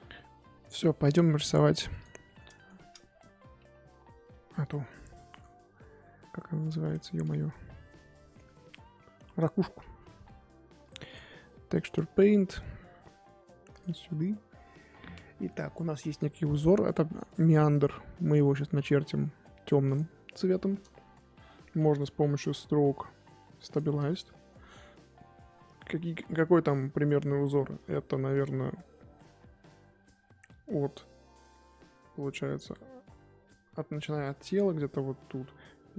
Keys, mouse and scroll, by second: 1.4 click, 2.2-2.7 shift+middle drag, 2.7-3.6 scroll up 1, 3.6 KP_3, 6.6-7.6 middle drag, 7.6 Tab, 7.9 middle click, 8.6 z, 8.8 middle click, 9.1 z, 10.1 KP_3, 10.9 click, 11.8-13.8 drag, 19.9 click, 20.3-20.8 scroll up 3, 24.1-27.3 shift+middle drag, 27.3 f.